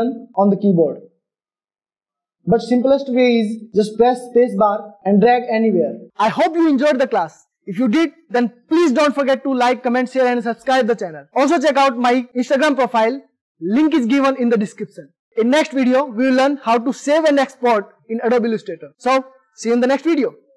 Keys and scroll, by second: 4.5 space.